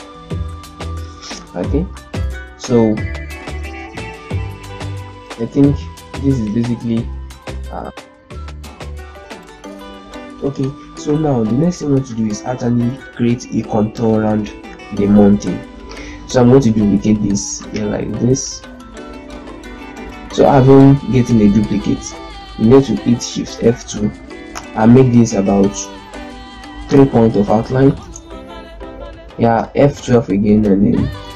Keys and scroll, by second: 1.5 z, 3.6 ctrl+space, 6.4 ctrl+g, 8.7 shift+F2, 9.5 shift+z, 22.9 shift+F2, 23.6 F12, 27.8 Return, 29.4 F12.